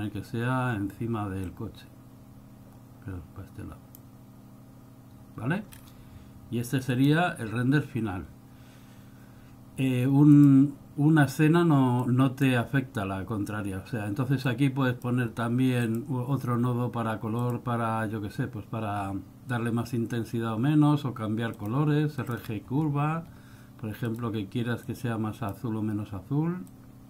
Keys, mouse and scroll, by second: 1.6 click, 5.9-6.5 scroll down 2, 12.2 click, 14.6 click, 15.9 click, 23.1 scroll up 3, 24.2 click, 25.0 click, 26.9 click.